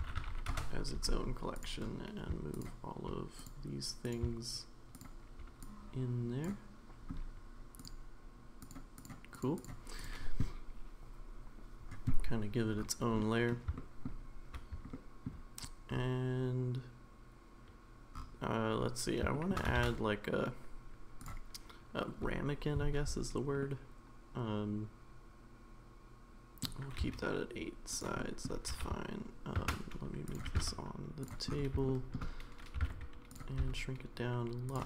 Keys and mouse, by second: 1.5 click, 2.5 shift+click, 3.4 click, 4.1 click, 5.7-6.4 drag, 8.6 click, 9.0 click, 9.3 click, 9.6 click, 13.2-13.5 middle drag, 13.8 shift+middle drag, 14.9-15.2 shift+middle drag, 19.3 shift+middle drag, 19.8 shift+a, 23.6-26.6 middle drag, 27.1 s, 28.2 middle click, 28.7 g, 30.5 g, 31.9 shift+middle click.